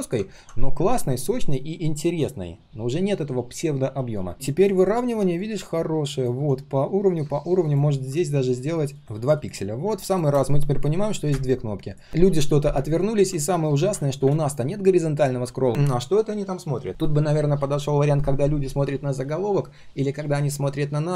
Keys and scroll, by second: 13.8 ctrl+\.